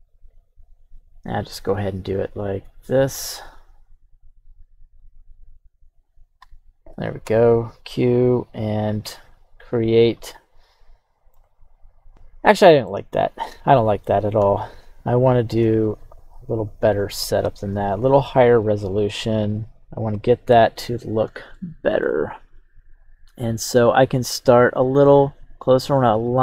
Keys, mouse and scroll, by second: 10.2-11.3 middle drag, 12.1 scroll down 2, 12.5 middle click, 13.2 right click, 13.7 scroll down 1, 13.8 middle click, 14.4 KP_1, 16.1 q, 17.1-17.4 scroll up 1, 20.1-21.0 scroll up 1, 21.0 scroll up 1, 21.5-26.4 shift+middle drag, 21.5 scroll down 1.